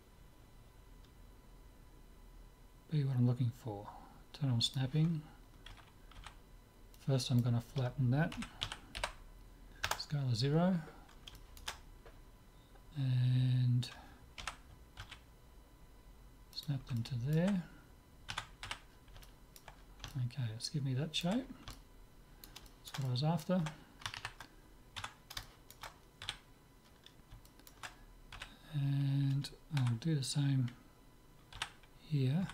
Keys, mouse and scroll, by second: 4.7-6.5 drag, 5.7 a, 6.2 b, 8.4 s, 11.0-13.9 middle drag, 14.5 g, 17.0-18.7 middle drag, 18.3 Tab, 18.7 z, 19.0-21.2 middle drag, 21.5-24.8 middle drag, 25.0 Tab, 25.5-29.5 middle drag, 26.3 z, 28.4 z, 29.8 a, 31.6 z.